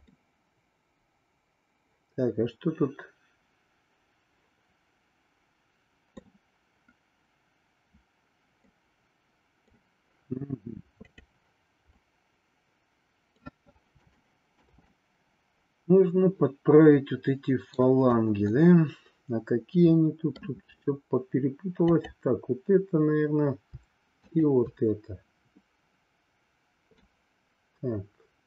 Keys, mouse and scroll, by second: 0.1-6.1 middle drag, 8.7-9.7 middle drag, 11.8-13.5 middle drag, 14.1 shift+middle click, 14.9-18.0 middle drag, 18.5-20.4 middle drag, 21.7-23.1 drag, 24.2-25.4 shift+drag, 27.1-28.4 middle drag.